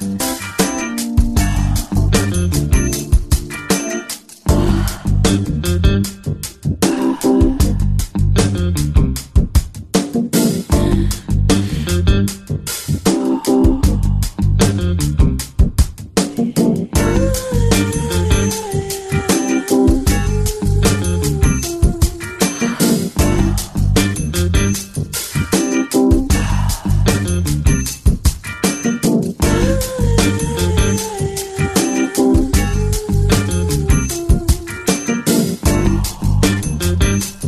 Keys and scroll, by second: 5.2 v, 20.4 space, 27.1 ctrl+alt+super+space, 32.5 ctrl+j, 34.5 t.